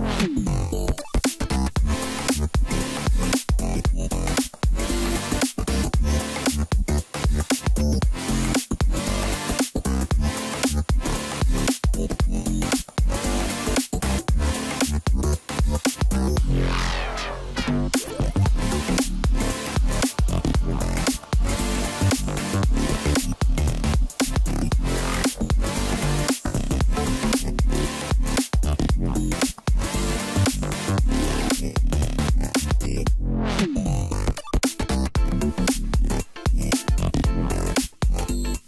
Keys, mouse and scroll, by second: 1.4 click, 1.8-4.0 middle drag, 4.0 ctrl+a, 5.6 Tab, 6.1 middle click, 6.6-7.3 scroll up 1, 7.3-7.8 scroll down 1, 7.8 2, 8.3 click, 9.4 shift+click, 9.9 middle click, 10.5-11.5 scroll up 1, 11.5 scroll up 1, 11.6 shift+d, 13.8 p, 14.5 Tab, 15.4 click, 16.7 KP_Divide, 18.0 Tab, 18.4 a, 19.2 KP_Decimal, 20.0 middle click, 20.5-21.0 scroll up 1, 21.0 1, 21.5 click, 22.4 g, 25.9 click, 26.9 click, 27.4-28.1 scroll up 1, 28.1 scroll down 2, 28.4-30.6 middle drag, 30.6-31.4 scroll up 1, 31.4 g, 33.8 g, 38.5-38.6 middle drag.